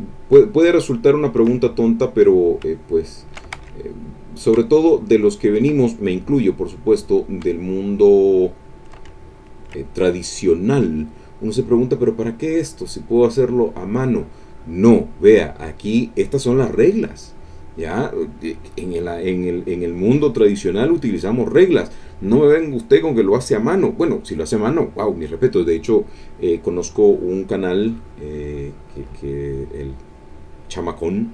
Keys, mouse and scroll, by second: 2.5 shift+click, 3.5 ctrl+shift+z, 4.4-5.8 shift+drag, 7.2-9.0 shift+drag, 9.2 ctrl+shift+middle click.